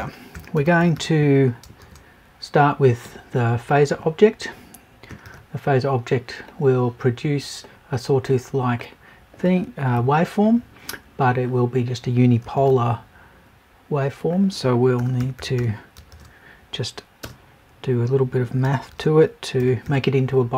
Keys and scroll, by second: 9.9 Left.